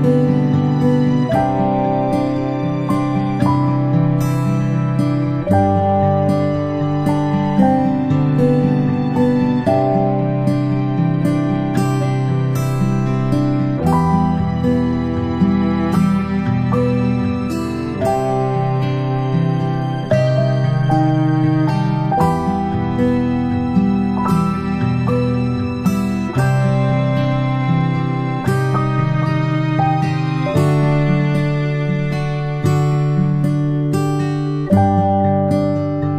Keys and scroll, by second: 0.1-0.8 typing, 1.7 ctrl+a, 3.3 ctrl+], 4.2 ctrl+[, 6.7-8.8 ctrl+], 12.8-13.8 typing, 15.7 ctrl+z, 16.3 v, 18.2 Delete, 20.7 space, 23.1 i, 26.2-26.9 typing, 28.0 v, 28.9-32.9 space.